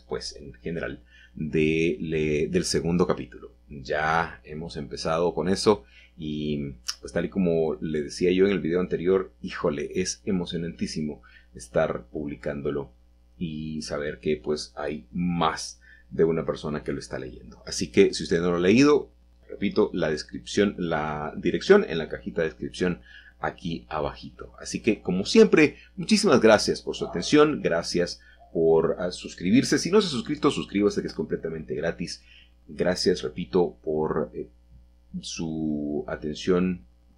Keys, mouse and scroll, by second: 0.9 shift+click, 1.3-1.8 middle drag, 3.0 middle click, 4.8 g, 5.4 z, 9.8-10.6 shift+drag, 11.8 s, 12.0 z, 14.3 click, 15.0 f, 15.7 Escape, 15.9 Escape, 16.1 g, 16.6 z, 20.9 shift+click, 23.5-24.5 middle drag, 24.7 middle drag, 25.1 middle click, 29.5-30.1 shift+drag, 32.6-33.2 middle drag, 33.2-34.4 scroll down 2.